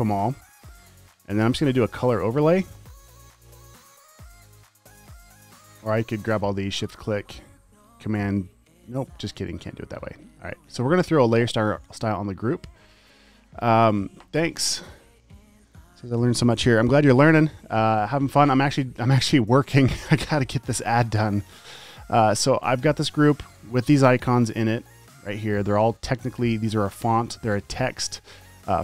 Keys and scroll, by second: 8.5 super+BackSpace, 20.3 typing.